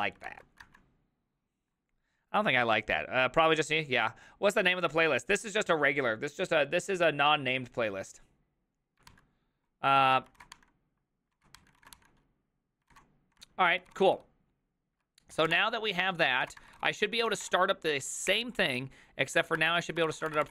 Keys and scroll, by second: 0.7 ctrl+alt+c, 10.4 alt+{, 10.4 ctrl+a, 10.6 ctrl+a, 11.4 ctrl+a, 11.6 ctrl+a, 11.8 ctrl+a, 12.0 ctrl+a, 12.9 ctrl+a, 13.9 ctrl+c, 14.0 ctrl+c, 15.1 ctrl+c, 15.4 typing, 16.5 Return, 16.5 ctrl+a, 16.6-17.9 typing, 16.8 ctrl+c, 16.9 ctrl+c, 19.7 ctrl+h, 20.1 ctrl+c, 20.2 typing, 20.3 Return, 20.4 ctrl+d.